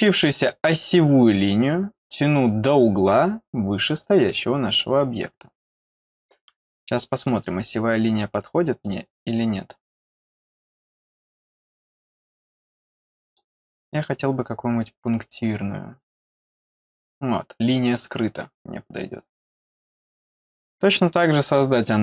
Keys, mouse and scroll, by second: 0.4 middle click, 1.7-2.3 scroll up 1, 2.5-3.0 scroll up 1, 4.2 click, 5.7-6.2 scroll down 2, 6.6 middle click, 8.8 click, 13.2 click, 16.0 click, 19.8 click, 21.0 click.